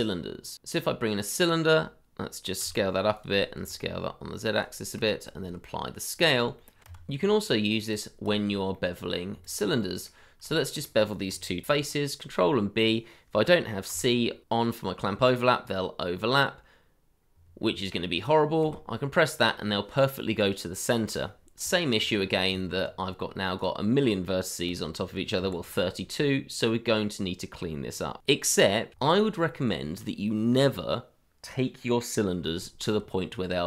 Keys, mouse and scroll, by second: 1.7 s, 2.6 z, 4.4 ctrl+a, 5.7 shift+middle click, 5.9-6.8 scroll up 1, 6.8 t, 7.1 Tab, 8.4 scroll down 1, 9.1 middle click, 9.4 shift+click, 10.0 middle click, 10.1-10.5 scroll up 1, 10.8 shift+middle click, 11.8 ctrl+b, 14.3 c, 18.6 c, 21.5-21.9 scroll up 1, 22.1 shift+middle click, 22.2 scroll up 1, 23.0-23.6 scroll up 1, 24.7 g, 25.3 Escape, 25.6 scroll down 1, 26.6 middle click, 29.1-29.4 scroll up 1, 29.5 middle click, 29.8 shift+middle click, 32.6-33.0 scroll up 1, 33.2 shift+middle click, 33.3-33.6 scroll up 1.